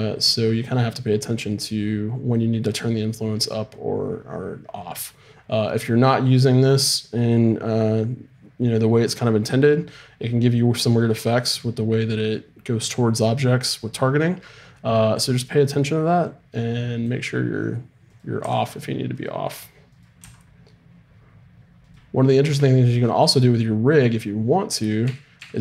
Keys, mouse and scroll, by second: 17.0-18.3 drag, 18.3-20.6 right drag, 18.4 r, 20.2 r, 22.3-23.8 middle drag, 25.0 a, 25.4 a.